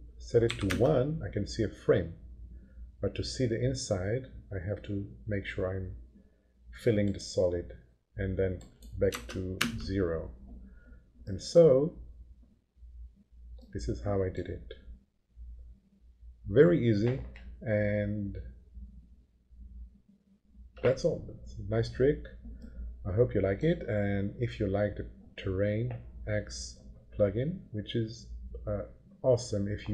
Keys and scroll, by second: 0.4 1, 0.7 Return, 9.1 0, 9.5 Return.